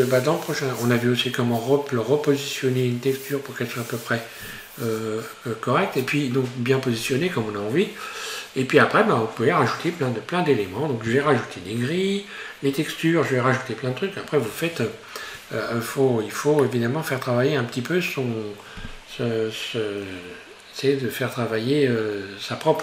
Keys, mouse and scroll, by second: 16.7-19.9 shift+middle drag.